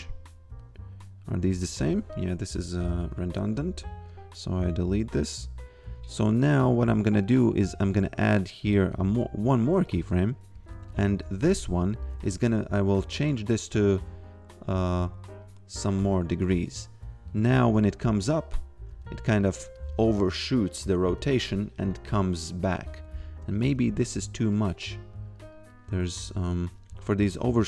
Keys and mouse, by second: 2.0 click, 2.8 Delete, 4.1 click, 8.9 ctrl+click, 9.9 click, 10.6 a, 11.7 click, 13.3 click, 17.7 f, 19.5 click, 19.9 f, 21.9 click, 23.4 a, 23.7 g, 24.5 click.